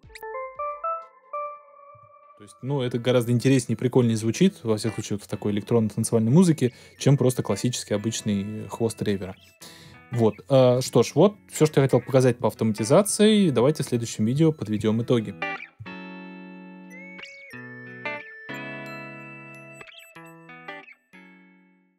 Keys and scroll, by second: 1.9 space.